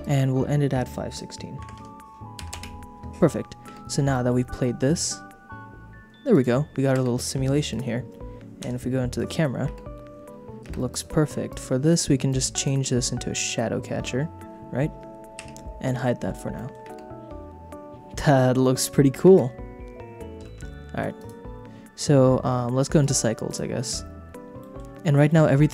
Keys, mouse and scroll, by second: 0.0-2.6 drag, 3.8 space, 4.1 middle click, 4.6 middle click, 6.4 click, 6.9 space, 8.6 KP_0, 9.6 space, 10.6 space, 10.9 click, 11.5 click, 12.3 click, 12.5 click, 15.4 h, 16.5 shift+middle click, 16.9 space, 19.3 space, 20.6 ctrl+z, 21.1 click, 24.6 click, 25.2 middle click.